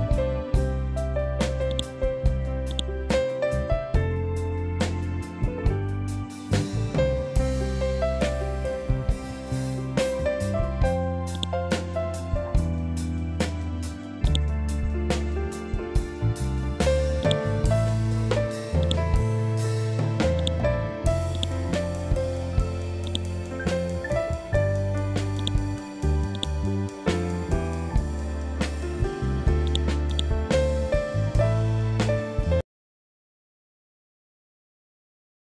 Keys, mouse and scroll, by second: 1.2 click, 4.0 scroll down 1, 4.9 scroll up 1, 10.8 click, 11.9 scroll up 1, 12.9 scroll down 1, 13.8 click, 14.3 scroll down 1, 16.7-19.9 drag, 19.9 click, 21.6 scroll down 1, 22.5 click, 23.7 scroll down 1, 24.8-29.1 drag.